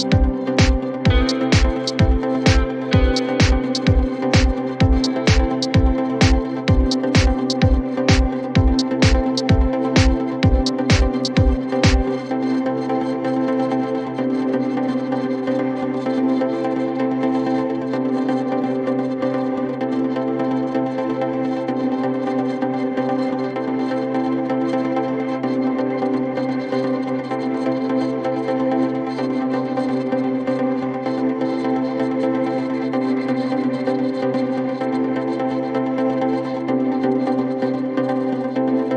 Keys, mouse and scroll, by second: 0.0 n, 0.3 scroll up 2, 0.5-2.1 middle drag, 2.1 scroll up 2, 2.3 middle click, 3.0 click, 3.3-4.4 middle drag, 4.4 click, 5.0-5.4 scroll up 1, 5.4 c, 13.7 scroll down 1, 13.8-14.8 middle drag, 14.8-15.3 scroll up 1, 15.3-16.3 drag, 16.3-17.0 scroll up 1, 17.0-23.6 drag, 23.7 click, 24.2 scroll down 2, 24.4-25.6 middle drag, 25.6 ctrl+z, 25.9 ctrl+z, 26.1 click, 26.3-27.3 scroll up 2, 27.3 c, 34.5 click, 35.0-36.6 middle drag, 37.0 click, 37.6 scroll down 2, 37.9-38.6 scroll up 1, 38.6 click.